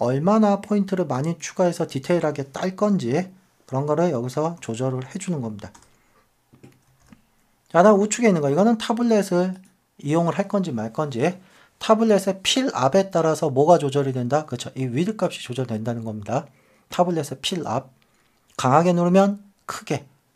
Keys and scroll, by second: 5.8 Tab, 7.0 super+d.